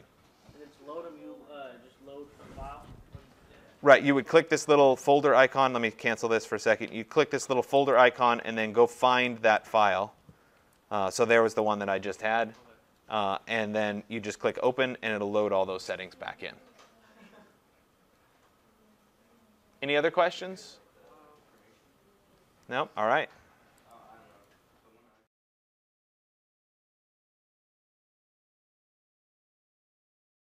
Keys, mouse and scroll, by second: 6.1 click, 8.0 click, 10.8 click, 11.6 click, 14.7 click, 16.7 click, 23.9 click, 24.5 right click.